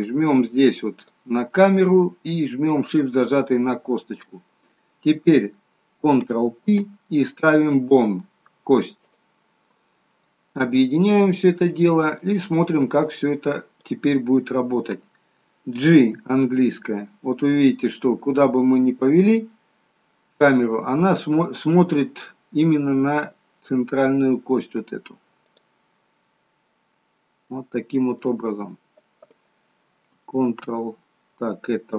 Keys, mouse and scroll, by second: 1.0 click, 2.7 shift+click, 6.5 ctrl+p, 10.8 middle click, 12.8-13.1 scroll down 1, 13.1 middle click, 16.2 g, 27.0-27.6 scroll down 3, 27.4 middle click, 30.6 ctrl+z.